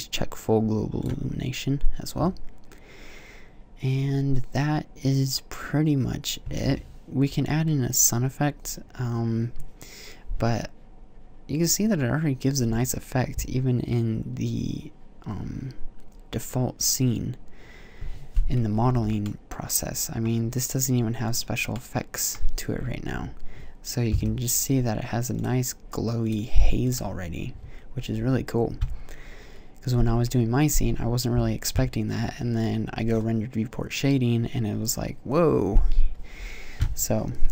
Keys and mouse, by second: 18.6 z, 18.7 z, 22.9 a, 23.9 KP_0.